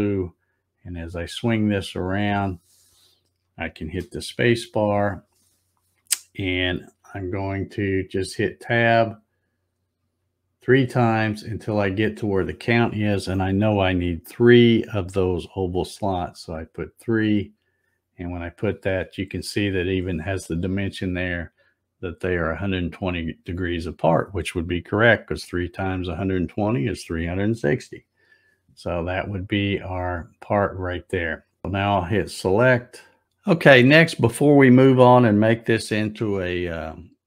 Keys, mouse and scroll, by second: 3.8 space, 8.5 Tab, 10.0 Tab, 11.2 Tab.